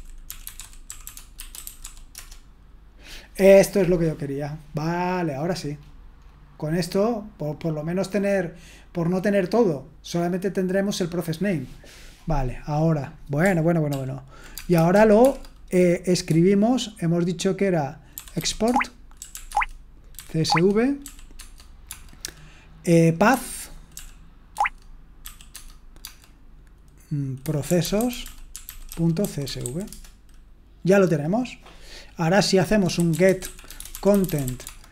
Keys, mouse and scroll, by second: 0.0-2.3 typing, 13.9 ctrl+p, 14.5-15.2 typing, 18.1-21.8 typing, 18.6 Tab, 23.7-26.0 typing, 24.5 Tab, 27.1-30.1 typing, 32.7-34.9 typing.